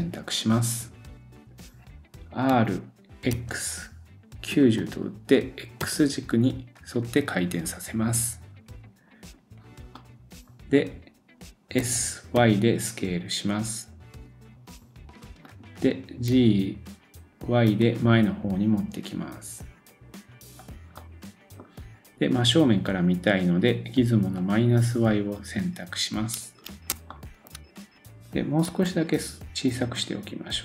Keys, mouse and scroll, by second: 10.0 middle click, 11.8 s, 21.0-26.4 drag, 21.0 middle click, 25.1-26.4 scroll up 4, 26.6-30.6 shift+drag, 27.1 shift+middle click, 27.6-28.5 scroll down 1, 28.7 s.